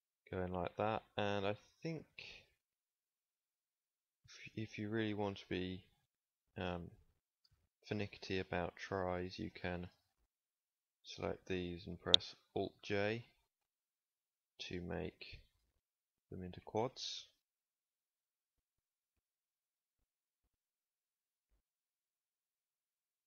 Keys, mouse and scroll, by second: 0.7 click, 2.9-4.0 drag, 9.3 alt+j, 11.9 alt+j, 14.8 alt+j, 18.7 alt+j, 20.9 alt+j.